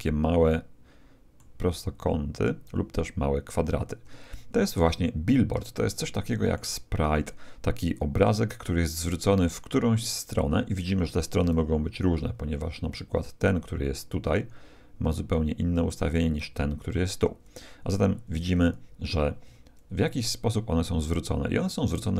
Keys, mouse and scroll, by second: 1.7-3.4 middle drag, 3.4-4.3 scroll down 1, 4.3-4.7 scroll down 1, 4.3 middle click, 4.7-7.5 middle drag, 11.4 KP_1, 14.1-17.5 d, 14.3-15.9 drag, 16.3-18.0 drag, 18.5 ctrl+z, 18.9 ctrl+z, 21.9-22.1 right drag.